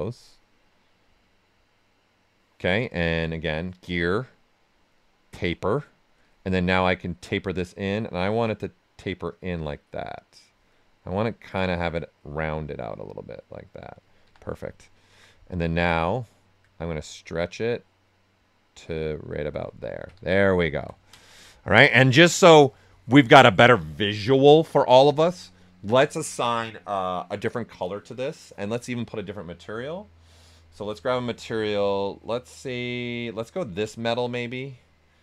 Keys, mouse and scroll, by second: 3.6 click, 5.9 right click, 6.7-10.7 drag, 10.7-12.9 right drag, 12.9 click, 14.2 w, 14.5 right click, 16.0 alt+click, 16.8-19.7 drag, 19.7 ctrl+right click, 20.3 right click, 20.6 alt+right click, 21.1 ctrl+alt+right click, 21.6 right click, 30.5 click, 33.7 click.